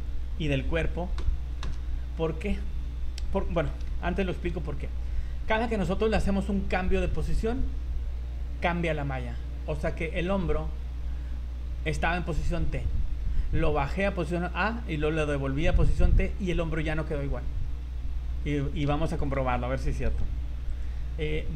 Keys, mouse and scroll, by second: 1.2 Delete, 4.0 ctrl+z, 5.6 right click, 9.4 scroll up 3, 10.0 shift+middle click, 10.4 scroll up 1, 10.5 z, 18.3-18.7 scroll down 4, 19.1 shift+right click, 20.1 Delete.